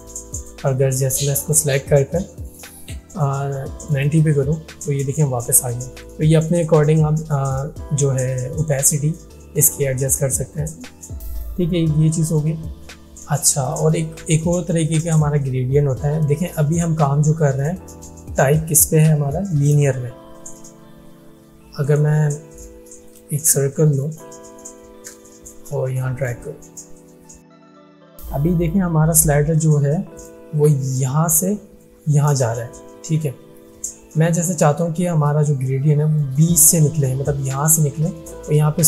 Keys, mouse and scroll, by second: 21.9 right click, 21.9 right click, 23.1 click, 23.5 space, 23.7-24.3 click, 24.0 space, 25.2-26.4 alt+shift+drag, 36.2-37.0 drag.